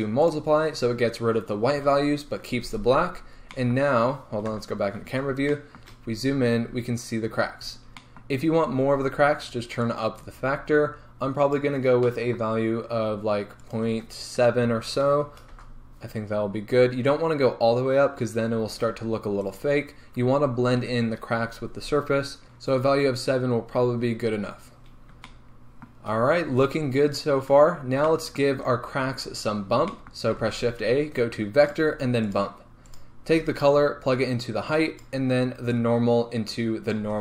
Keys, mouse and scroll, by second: 0.4 click, 3.5-10.1 middle drag, 4.6 KP_0, 6.0-10.1 scroll up 3, 10.1-19.7 drag, 15.7 Return, 19.7 right click, 22.4-35.0 shift+middle drag, 24.8-25.4 scroll down 2, 26.5 scroll down 1, 35.0 click.